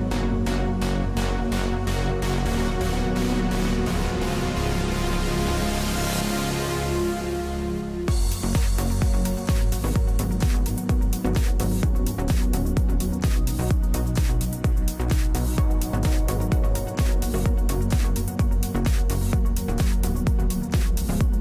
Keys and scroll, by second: 8.6-9.2 scroll, 13.0-13.8 typing, 14.0 Return, 19.1 space, 20.0 space.